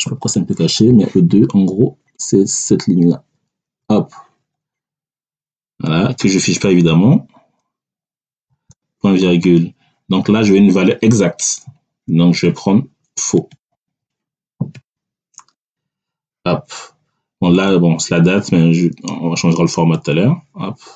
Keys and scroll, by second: 1.6 Down, 3.7 Left, 8.4 ., 14.6 [, 15.5 Return.